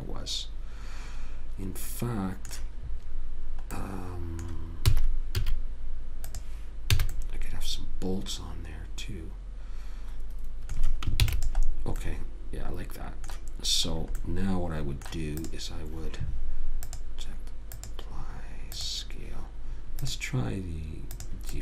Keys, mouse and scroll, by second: 4.1 middle click, 5.2 s, 7.3 a, 7.9 middle click, 11.5 ctrl+s, 14.3-15.8 middle drag, 15.8 click, 20.4 click.